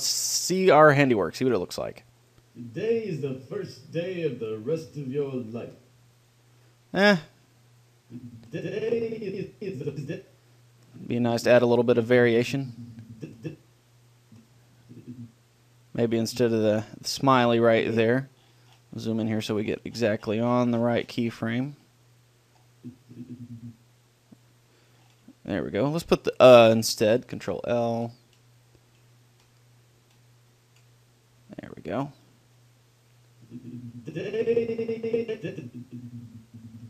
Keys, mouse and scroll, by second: 0.9-4.3 drag, 6.5-9.9 drag, 19.3-21.0 middle drag, 22.1-23.1 middle drag, 23.1-24.6 drag, 25.6-27.5 middle drag, 27.7 ctrl+l, 33.5-35.3 drag.